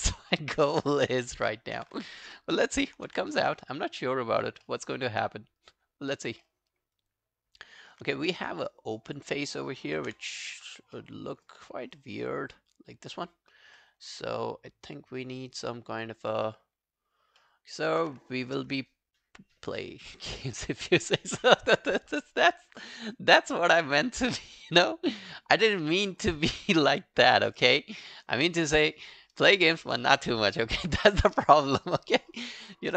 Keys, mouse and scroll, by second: 0.4 alt+middle click, 0.6 alt+right click, 0.8 alt+click, 1.6 alt+scroll down 2, 2.6 alt+scroll down 1, 2.7 ctrl+i, 3.3 alt+middle click, 3.5 alt+right click, 3.8 alt+click, 5.0 alt+scroll up 1, 5.2 alt+click, 6.5 alt+middle click, 6.8 alt+scroll up 2, 7.0 alt+click, 8.2 right click, 9.9 ctrl+i, 10.3 alt+click, 11.0 alt+middle click, 11.3 alt+scroll down 1, 11.5 alt+click, 13.8 alt+middle click, 14.1 alt+right click, 14.4 alt+click, 16.2 alt+scroll down 1, 16.5 alt+middle click, 16.8-17.1 alt+scroll up 1, 17.1 alt+scroll down 1, 17.4 alt+middle click, 27.9 double click, 31.7 alt+middle click, 32.1 alt+click.